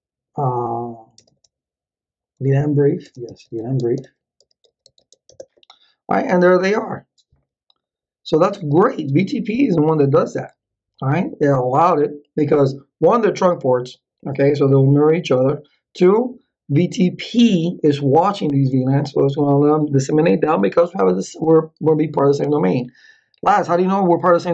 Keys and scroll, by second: 0.0-1.2 typing, 2.5-5.6 typing, 24.4-24.5 typing.